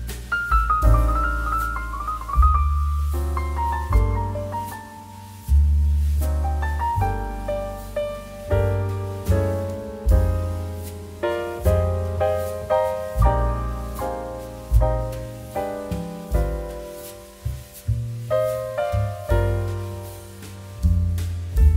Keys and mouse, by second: 0.3 shift+middle click, 1.0 click, 1.7 0, 2.0 Return, 2.6 click, 2.9 1, 3.2 Return, 3.5 click, 4.6 middle click, 5.5 click, 7.4 middle click, 7.7 shift+middle click, 8.1 shift+middle click, 8.4 g, 10.9 click, 14.0 middle click, 14.2 shift+middle click, 14.6 click, 16.5 click, 21.4 click.